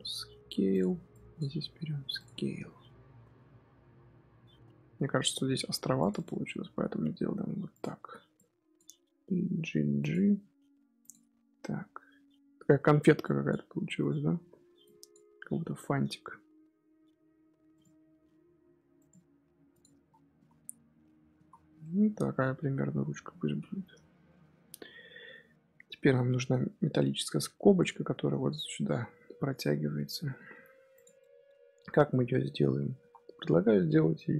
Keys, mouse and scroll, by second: 1.0 click, 1.5 s, 2.2 Tab, 2.6 scroll down 1, 2.6-3.4 scroll up 1, 3.4 scroll down 1, 3.5-4.5 scroll up 3, 4.5 Tab, 5.6 ctrl+r, 6.6 s, 8.3 click, 8.9 g, 10.3 s, 11.1 Tab, 12.1 Tab, 12.9 Tab, 13.1 click, 13.6 s, 14.3 1, 14.7 click, 15.3 s, 18.0 s, 19.8 Tab, 20.0 scroll down 2, 20.0 scroll up 1, 20.3 z, 20.5-21.3 middle drag, 21.3 z, 21.5 scroll down 1, 21.7 scroll up 1, 21.7-23.3 middle drag, 23.3-23.8 scroll down 2, 23.8 KP_3, 24.3 KP_1, 26.9-30.9 middle drag, 30.9 click, 31.1-31.5 middle drag, 31.5-32.0 scroll up 1, 32.0-32.9 middle drag, 32.9 shift+a.